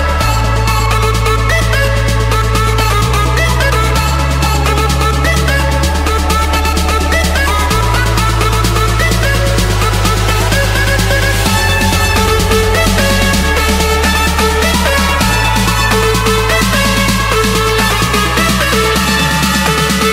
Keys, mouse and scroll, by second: 0.0-1.4 typing, 3.7-4.8 drag, 5.0 3, 5.4 Return, 6.2 Escape, 7.3 click, 10.2 click, 14.1-15.7 typing, 16.2 Return, 17.2 Escape, 18.6-19.6 drag, 19.8-20.1 scroll down 11.